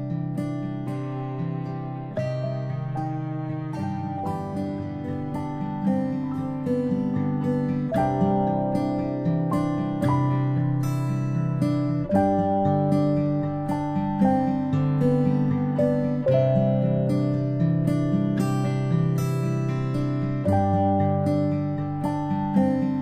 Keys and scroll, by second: 8.2-8.6 ctrl+space, 9.0 a, 14.2 ctrl+z, 20.6 space, 20.9 space.